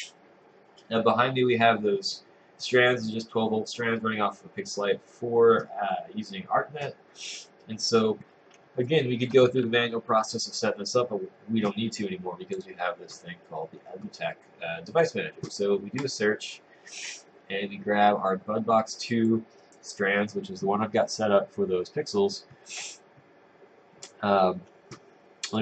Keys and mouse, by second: 8.9 click.